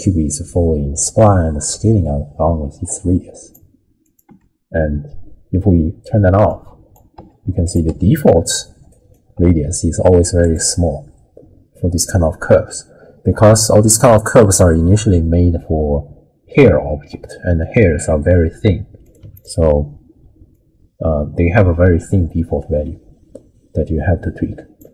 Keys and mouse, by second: 4.0 click, 4.3 m, 6.5 click, 7.2 m, 7.7 click, 7.9 m, 8.9 ctrl+right click, 13.3 middle click, 14.2 middle click, 19.0 click, 20.5-24.8 drag.